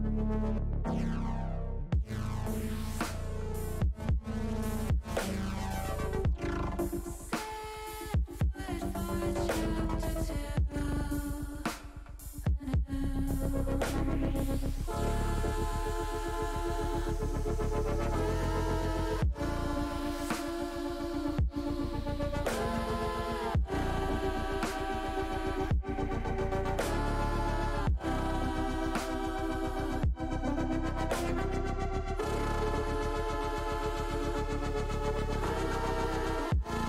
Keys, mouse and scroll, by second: 1.8 KP_9, 3.1 KP_7, 3.7 KP_9, 5.9 KP_7, 8.0 shift+middle click, 9.1 shift+middle click, 10.0 middle click, 10.7 shift+middle click, 11.3 middle click, 12.5 shift+middle click, 12.9 middle click, 16.3 shift+click, 17.7 ctrl+click, 19.4 ctrl+click, 19.9 ctrl+click, 20.6 ctrl+click, 21.3-22.4 drag, 22.8-24.4 middle drag, 25.2-26.6 drag, 27.1-28.6 middle drag, 29.7-30.8 middle drag, 31.1 ctrl+z, 32.6 ctrl+shift+z, 33.4 middle click, 34.5 middle click, 36.1 click.